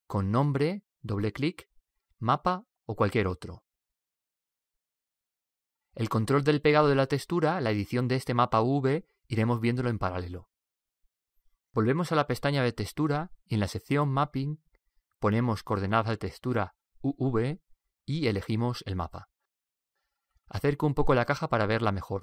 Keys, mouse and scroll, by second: 7.7-10.9 drag, 15.2 click, 17.9 click, 21.5-22.2 middle drag.